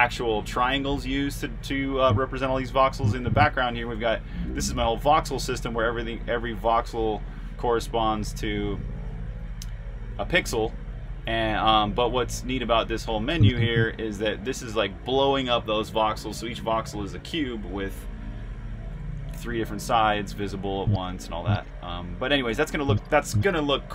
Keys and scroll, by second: 2.8-13.6 typing, 22.5-23.2 typing.